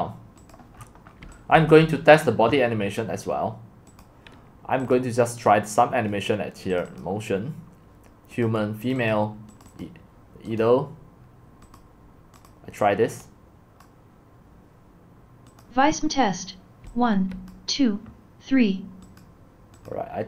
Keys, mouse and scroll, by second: 0.8-1.2 scroll down 11, 1.3 right click, 1.7 click, 3.9 right click, 4.3 click, 4.8 right click, 6.8 click, 8.3 click, 8.8 click, 9.1 click, 9.5 click, 10.6 right click, 12.5 click, 13.8 click, 15.9-17.5 scroll down 9, 16.8 c, 17.9-20.2 drag.